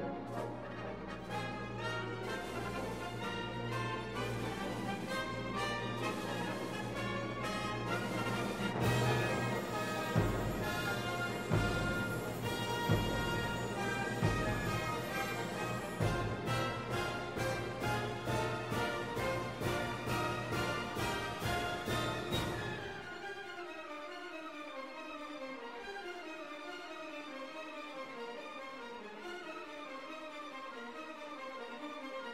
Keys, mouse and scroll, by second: 2.8 click, 3.9-5.0 drag, 5.3 click, 7.3 click, 7.9-8.9 drag, 8.9 click, 9.7-10.7 middle drag, 10.7 click, 11.4 click, 12.4-13.6 middle drag, 13.6 right click, 14.1 g, 18.9 shift+a, 19.2 click, 20.3 click, 21.3-22.5 drag, 22.5 middle click, 22.7-25.2 drag, 23.6 shift+d, 25.2 x, 26.5-28.1 drag, 28.2 click, 28.7 click, 29.2 click, 29.5 shift+d, 29.8 click, 30.5 click, 31.3 click.